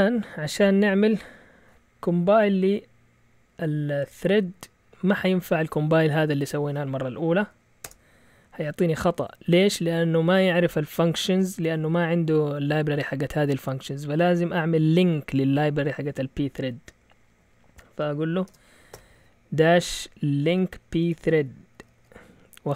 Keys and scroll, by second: 4.1 Up, 4.5 typing, 7.8 Return, 18.4-18.9 typing, 20.5-22.4 typing.